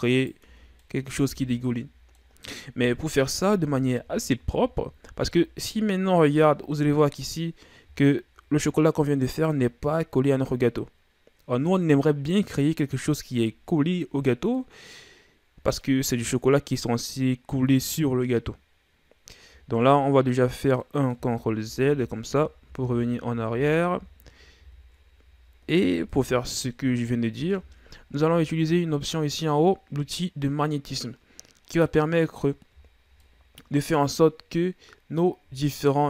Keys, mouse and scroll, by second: 0.4 Tab, 0.7 scroll down 1, 0.8 middle click, 1.3 a, 1.6-2.8 middle drag, 2.8 KP_1, 3.7 ctrl+z, 4.0 ctrl+z, 4.3 ctrl+z, 4.8 ctrl+z, 5.3-6.4 middle drag, 6.4-7.0 ctrl+scroll down 5, 7.0 middle click, 7.3-7.9 scroll up 3, 7.9 shift+scroll down 3, 8.1-12.0 middle drag, 14.6-17.6 middle drag, 20.8 middle click, 21.3 ctrl+z, 21.6 ctrl+z, 21.9 ctrl+z, 22.3 ctrl+z, 22.6 ctrl+z, 22.9 ctrl+z, 23.5 ctrl+z, 23.9 ctrl+z, 24.6 ctrl+z, 26.1 KP_1, 27.2-28.0 ctrl+scroll up 1, 28.0-28.8 shift+scroll up 4, 28.8-31.7 ctrl+scroll up 3, 31.7 click, 32.8-33.2 shift+scroll down 4, 33.2 middle click, 34.2-35.5 scroll up 1, 35.5 g.